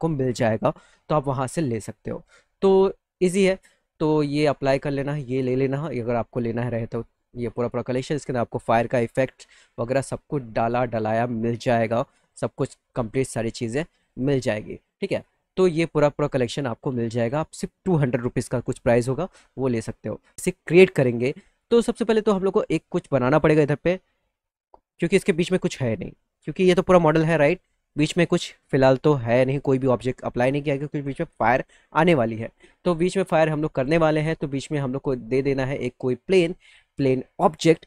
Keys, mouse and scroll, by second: 8.7 click, 8.8 click, 10.7 click, 11.1 click, 11.5 click, 11.6 click, 11.8 click, 12.1 click, 12.4 click, 12.7 click, 12.9 click, 13.2 click, 13.3 click, 13.5 click, 13.8 click, 14.0 click, 14.1 click, 15.0 click, 21.5 click, 22.5 click, 23.1 click, 26.7 z, 27.2 alt+middle click, 28.7 middle click, 29.9 middle click, 33.6 click, 36.5 click.